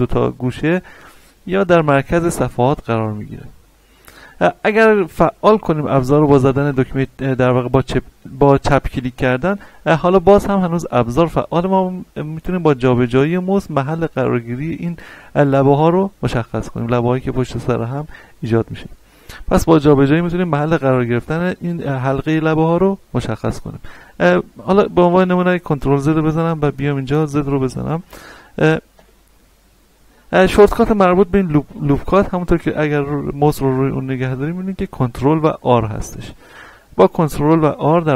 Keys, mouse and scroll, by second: 6.7 click, 24.6 right click, 25.2 ctrl+z, 27.0 z, 27.6 shift+middle click, 28.1-28.9 scroll up 1, 28.9 a, 29.7-31.5 scroll down 1.